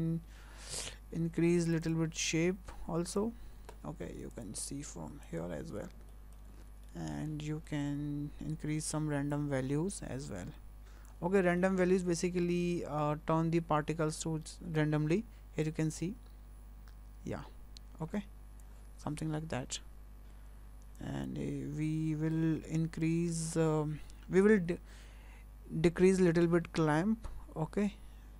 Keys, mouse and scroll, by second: 1.7 click, 1.8 click, 3.1 click, 4.5 click, 5.2 click, 5.7 scroll up 2, 6.1 shift+middle click, 6.8 shift+middle click, 7.3 scroll down 2, 7.7 shift+middle click, 9.3 click, 11.3 scroll up 2, 11.6 shift+middle click, 12.1 scroll down 1, 12.5 shift+middle click, 15.6 click, 21.0 click, 26.4 click.